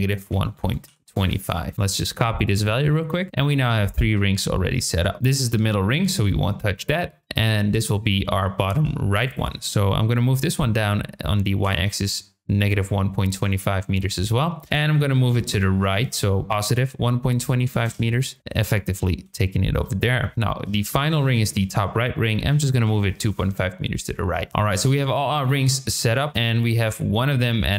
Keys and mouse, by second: 4.8 shift+middle click, 7.0 shift+middle click, 7.7 shift+middle click, 9.2-14.0 drag, 14.6-18.4 drag, 20.1 shift+middle click, 20.8-23.8 drag, 25.6 shift+middle click, 26.8-27.7 drag.